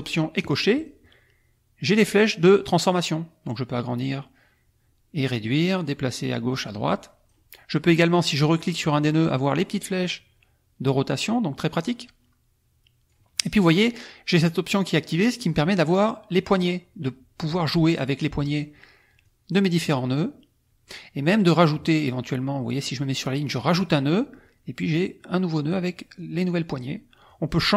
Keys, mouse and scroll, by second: 0.4 click, 0.8 click, 1.9-7.4 drag, 8.8 click, 10.0-13.3 drag, 14.9 click, 15.3 click, 16.5-18.7 drag, 19.2 click, 19.8-21.0 drag, 23.6 click, 24.9 click, 26.1 click, 27.2 click.